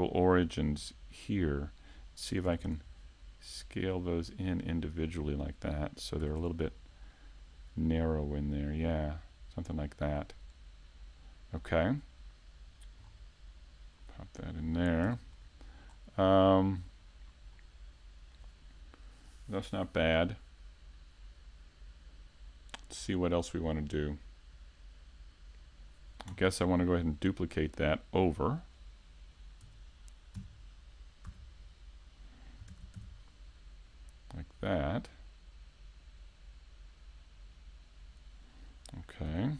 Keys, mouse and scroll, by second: 5.9 click, 6.2 a, 6.4 Tab, 6.7-7.1 scroll down 1, 7.1 middle click, 11.6 middle click, 13.0-13.8 scroll down 1, 14.0 click, 14.0-14.4 scroll down 3, 14.4 middle click, 15.1 a, 15.4-15.9 scroll up 2, 15.9-16.2 scroll down 1, 17.0 scroll up 1, 17.5 middle click, 27.2 right click, 27.6 middle click, 29.6 KP_1, 30.4 KP_5, 31.6-32.2 scroll up 2, 32.7 shift+d, 38.1 click, 39.3 a.